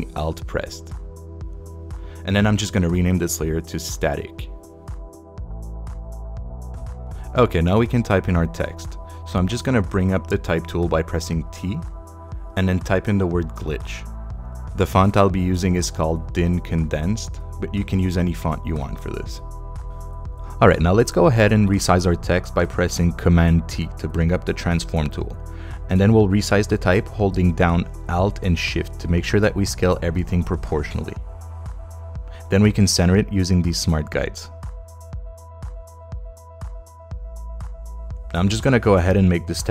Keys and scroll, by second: 0.9 alt+shift+Return, 1.4 shift+Return, 4.1-6.1 typing, 10.4 t, 13.4-15.8 typing, 23.6 super+t, 30.6 Return.